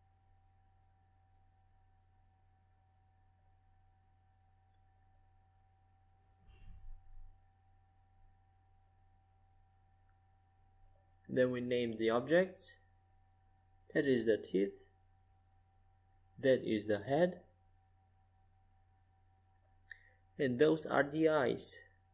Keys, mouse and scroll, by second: 0.4 z, 1.0 middle click, 1.5 z, 1.9-4.2 middle drag, 4.2 z, 4.8 middle click, 6.8-8.6 drag, 9.0-12.9 drag, 12.4 e, 17.9 right click, 18.4-20.5 drag, 21.7-22.1 right drag.